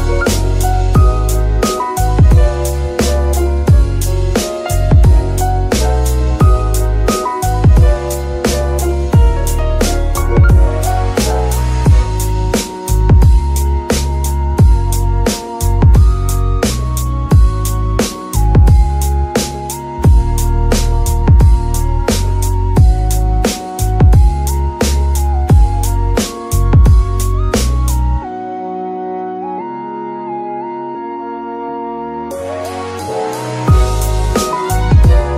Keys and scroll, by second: 0.3-2.0 typing, 4.1-4.9 typing, 8.7 F2, 9.7-12.4 typing, 13.7 BackSpace, 13.9 r, 14.5 Return, 16.9 KP_3, 19.3 shift+d, 24.1 g, 24.3 y, 24.5 g, 26.9 g, 28.9 Tab, 29.5 s, 30.6 Tab, 31.0 s, 32.7 g, 32.8 y.